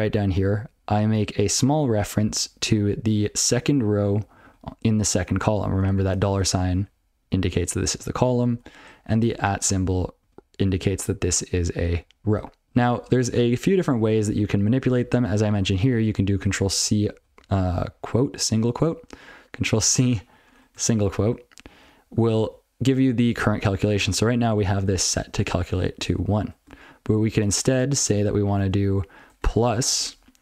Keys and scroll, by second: 0.1 ctrl+f, 0.2 ctrl+n, 0.3 ctrl+f, 1.3 ctrl+f, 1.5 ctrl+f, 1.8 ctrl+f, 2.1 ctrl+b, 2.4 ctrl+b, 2.6 ctrl+b, 3.1 ctrl+f, 4.1 ctrl+b, 4.2 ctrl+f, 5.5 ctrl+b, 5.7 ctrl+b, 6.4 ctrl+space, 6.6 ctrl+f, 6.7 ctrl+f, 7.3 ctrl+g, 7.9-8.4 ctrl+b, 9.1 ctrl+space, 9.3 ctrl+f, 9.6 ctrl+space, 9.6 ctrl+f, 10.2 ctrl+g, 12.6 ctrl+n, 12.8 ctrl+p, 13.0 ctrl+n, 13.3 ctrl+p, 13.6 ctrl+p, 13.8 ctrl+p, 14.2 ctrl+p, 14.4 ctrl+n, 14.6 ctrl+n, 14.8 ctrl+p, 15.0 ctrl+p, 15.2 ctrl+a, 15.6 ctrl+alt+f, 16.1 ctrl+n, 16.4 ctrl+n, 16.6 ctrl+n, 16.8 ctrl+n, 16.9 ctrl+f, 17.2 ctrl+f, 17.4 ctrl+f, 19.4 ctrl+g, 22.1 ctrl+p, 22.3 ctrl+n, 23.1 ctrl+alt+f, 23.7 ctrl+f, 23.9 ctrl+f, 24.0 ctrl+f, 24.2 ctrl+f, 24.5 ctrl+f, 24.7 ctrl+f, 27.6 ctrl+e, 28.0 space, 28.5 BackSpace.